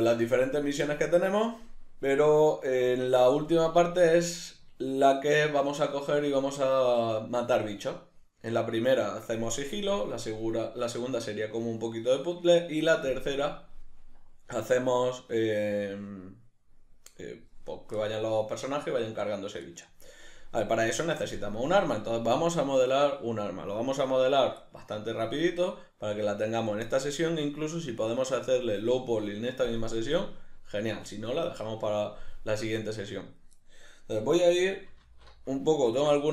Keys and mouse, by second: 4.0-36.3 middle drag.